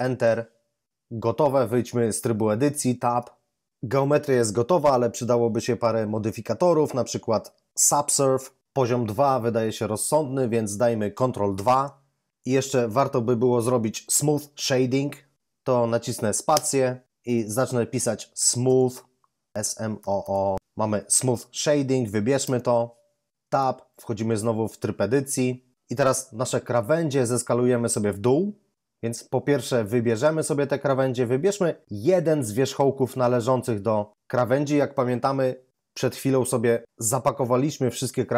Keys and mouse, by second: 2.9 Tab, 16.5 space, 18.3 typing, 19.9-20.5 typing, 23.3 Tab, 32.9 right click.